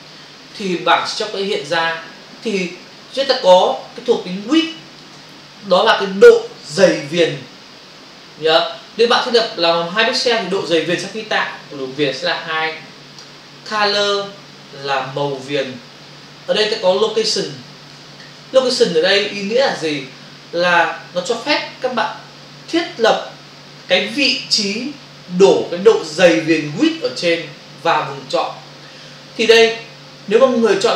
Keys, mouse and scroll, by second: 4.4 click, 14.8 click, 16.0 space, 17.4 click, 18.2 ctrl+alt+z, 18.9 shift+click.